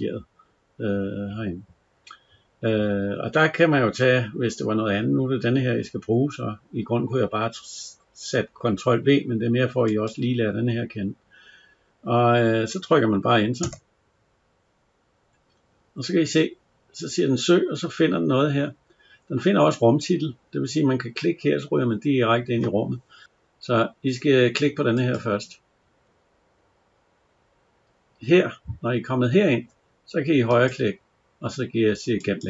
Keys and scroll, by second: 10.0 ctrl+v, 13.5 Return.